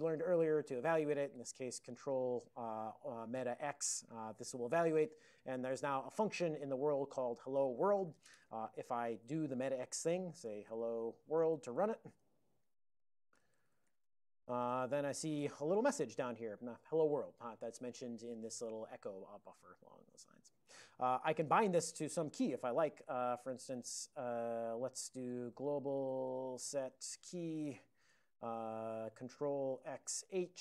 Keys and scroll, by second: 4.0 ctrl+alt+x, 9.2 alt+x, 10.4-11.9 typing, 13.1-14.5 typing, 14.7 Return, 22.8 alt+>, 23.4 Return, 23.5 Return, 25.1-28.0 typing, 28.1 Return, 29.9 ctrl+x.